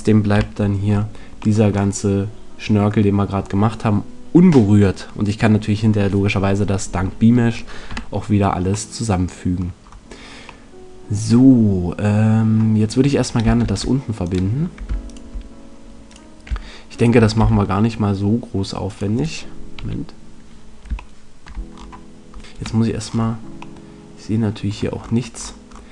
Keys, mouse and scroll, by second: 0.3 KP_Decimal, 0.4 right click, 1.4-3.5 right drag, 7.8 KP_Decimal, 8.6 middle click, 13.6 ctrl+Tab, 17.4 f, 19.7 KP_1, 22.3 KP_8, 22.5 KP_2.